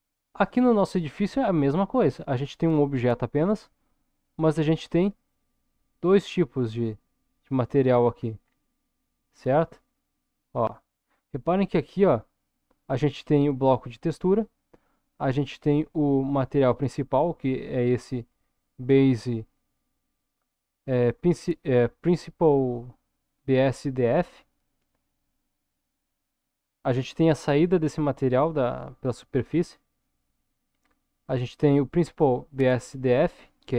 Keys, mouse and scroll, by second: 1.2 scroll down 1, 5.1 click, 7.4-9.8 scroll up 6, 9.8 click, 12.6-13.8 drag.